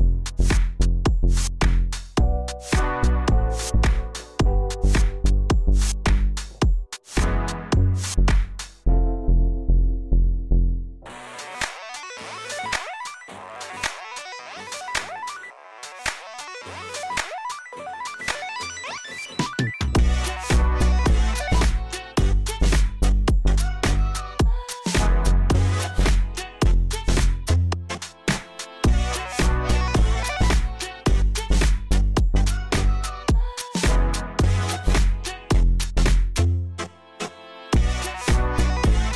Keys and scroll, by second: 6.3 p, 7.4 z, 15.6 f, 15.9 F3, 19.1 3, 21.2 4, 25.5 F3, 27.1 ctrl+z, 30.5 F3, 31.1 F3, 31.9 F3, 37.1 F3, 38.4 2, 38.9 ctrl+r.